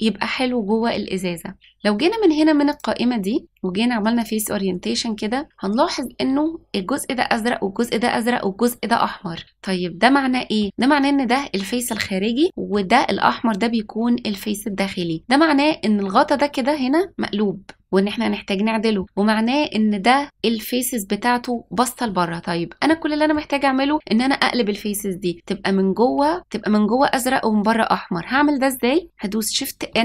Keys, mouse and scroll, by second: 2.7-4.4 drag, 9.3-10.6 middle drag, 12.4 middle click, 14.8 middle click, 22.8 middle click, 29.8 shift+n.